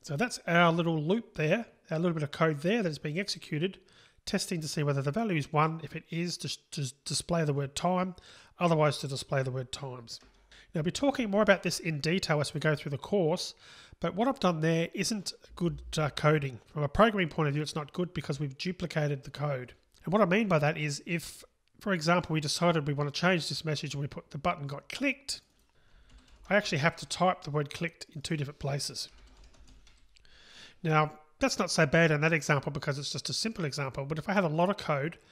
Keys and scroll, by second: 10.4 super+6.